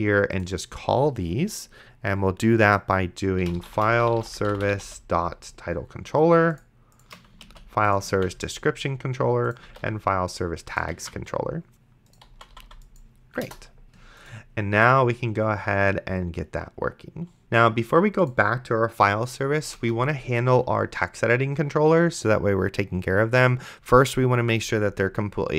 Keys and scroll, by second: 3.3-5.4 typing, 7.8 ctrl+c, 8.4 ctrl+v, 10.0 ctrl+v, 11.2 ctrl+s, 12.3 d, 13.4 BackSpace, 19.8 Return.